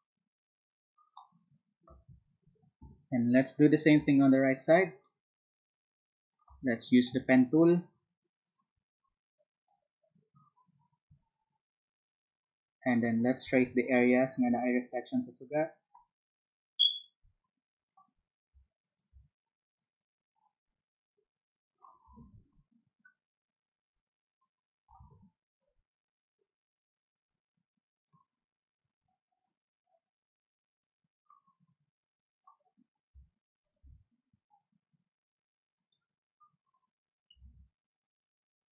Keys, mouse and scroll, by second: 3.9 space, 4.5-6.3 drag, 7.2 p, 8.4-13.1 drag, 14.9-18.6 drag, 22.4 ctrl+z, 24.6 click, 25.0 ctrl+z, 26.5-33.4 drag, 34.5 alt+click, 35.8 alt+click, 37.4 ctrl+z.